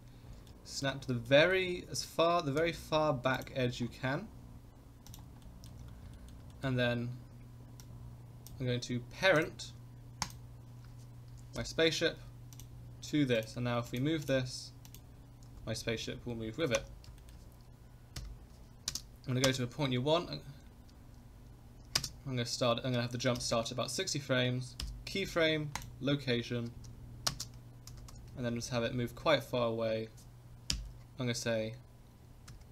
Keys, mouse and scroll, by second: 0.2 scroll up 2, 0.5-0.9 shift+middle drag, 1.0 scroll up 2, 1.3 shift+middle drag, 1.7 scroll up 2, 2.6 g, 3.6-4.4 scroll down 4, 5.1 click, 5.4-5.7 middle drag, 5.7-6.0 scroll down 3, 6.1 shift+middle drag, 6.5 middle click, 7.8-8.5 drag, 9.4 click, 10.2 ctrl+click, 11.5 ctrl+p, 13.3 click, 13.9 click, 14.2 click, 14.8 click, 15.4 g, 17.2 shift+middle click, 18.1 KP_0, 19.4 space, 21.9 space, 23.3 Left, 24.8 i, 26.6 space, 27.3 space, 27.8 g.